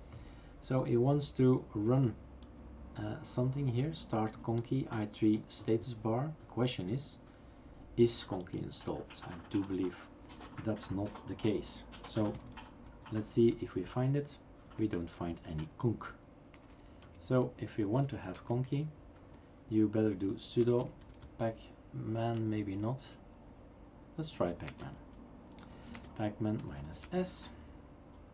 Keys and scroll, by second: 11.9-13.0 typing, 13.5 Tab, 13.8 Tab, 14.0 Tab, 16.5-20.7 typing, 22.0-23.3 typing, 24.9-28.3 typing.